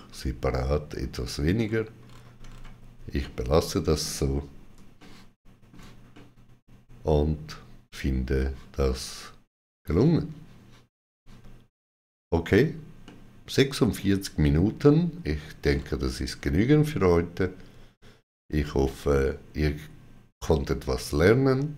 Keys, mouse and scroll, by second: 1.4-1.9 scroll down 3, 3.0 middle click, 3.0-3.3 scroll down 1, 4.8 shift+middle click, 5.9 shift+middle click, 12.8 shift+middle click, 15.5-16.2 scroll down 3.